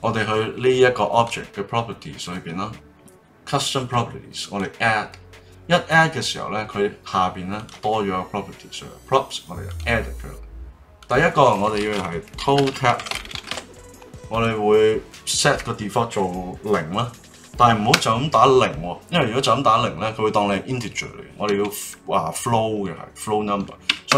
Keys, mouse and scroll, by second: 1.1 click, 2.2 click, 4.4-7.4 drag, 7.5 click, 9.7-12.7 drag.